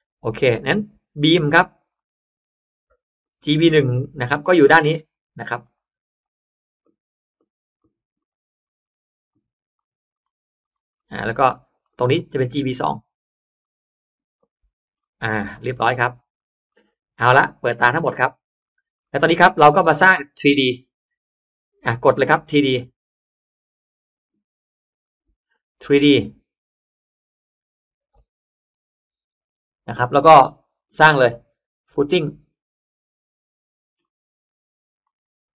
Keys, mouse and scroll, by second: 0.4 click, 1.0 click, 1.9 click, 3.1 click, 4.2 click, 5.0 drag, 5.5 drag, 6.1 drag, 6.7 drag, 7.3 drag, 7.7 drag, 8.1 drag, 8.5 click, 9.2 drag, 9.7 drag, 10.0 drag, 10.5 click, 10.9 middle click, 11.0 scroll up 1, 11.1 scroll down 1, 11.2 scroll up 1, 11.2 space, 11.8 middle click, 12.3 click, 13.5 click, 14.3 click, 14.9 middle click, 15.3 click, 15.3 space, 15.7-16.8 scroll down 1, 16.3 middle click, 16.6 middle click, 17.8 click, 18.2 middle click, 18.2 scroll up 1, 18.4-19.5 scroll down 3, 18.5 middle click, 18.9 middle click, 19.4 middle click, 20.3-20.8 scroll up 2, 20.4 middle click, 22.6 click, 23.8 click, 24.9 click, 25.9 click, 30.7 click, 32.0 click, 33.9 click, 35.4 click.